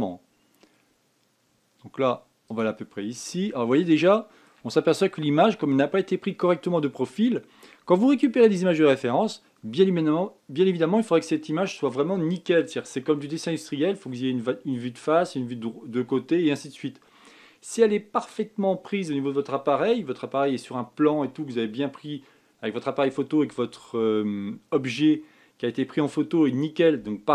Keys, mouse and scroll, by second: 3.8 scroll down 4, 4.7 shift+middle click, 5.5-8.6 scroll down 2.